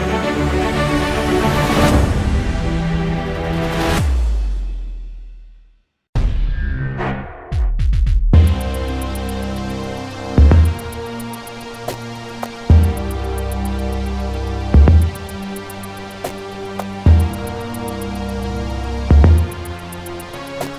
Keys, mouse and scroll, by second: 1.8 alt+middle click, 1.8-2.9 alt+drag, 2.9 scroll down 2, 3.0 alt+click, 3.2 alt+middle click, 3.4 click, 4.2 scroll up 1, 4.3 ctrl+z, 4.4-6.7 alt+drag.